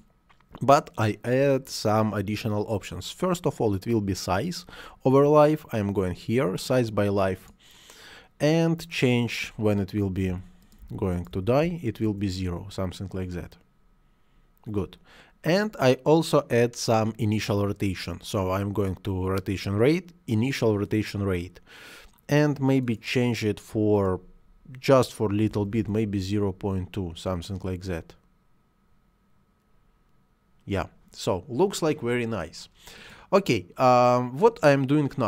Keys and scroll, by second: 10.1 0, 11.8 Return, 25.3 ., 25.4 2, 25.6 Return.